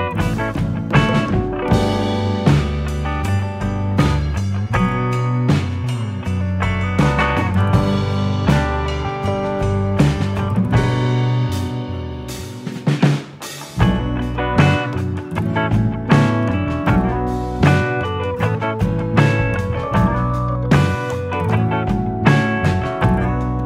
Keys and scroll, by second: 0.0-0.9 typing, 1.0 ctrl+-, 1.1 ctrl+-, 2.1 ctrl+], 2.1 ctrl+-, 3.9 v, 13.6 ctrl+shift+[, 16.8 ctrl+[, 23.4 ctrl+z.